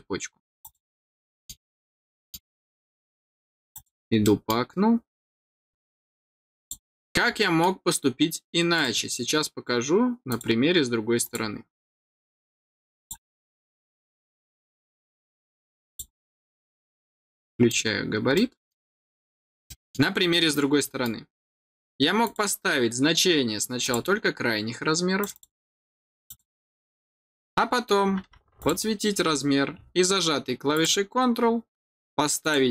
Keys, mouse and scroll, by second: 0.5 click, 1.0 scroll down 1, 1.1 middle click, 1.9 middle click, 3.6 click, 4.1 middle click, 5.4 click, 6.5 click, 6.9 middle click, 7.2 middle click, 8.7 click, 10.2 click, 11.1 click, 11.6 scroll down 1, 12.8 click, 12.9 click, 15.8 click, 16.7 scroll down 1, 16.9 middle click, 18.3 middle click, 18.9 middle click, 19.6 middle click, 20.7 middle click, 22.1 click, 23.7 click, 25.1 click, 28.6 click, 30.7 click, 32.4 click.